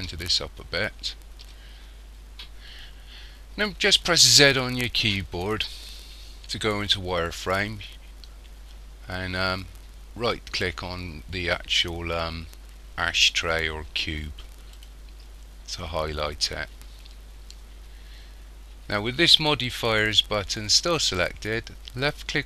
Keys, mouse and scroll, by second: 1.9 scroll up 1, 4.3 z, 14.8 right click.